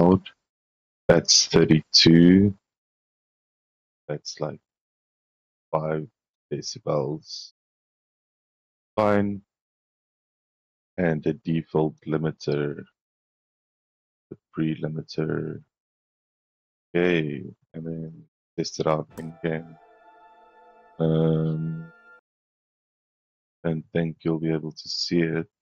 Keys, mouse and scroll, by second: 7.3 middle click, 8.8 click, 13.2 click, 17.3 click, 18.8 click, 23.0 click, 24.2-25.6 drag.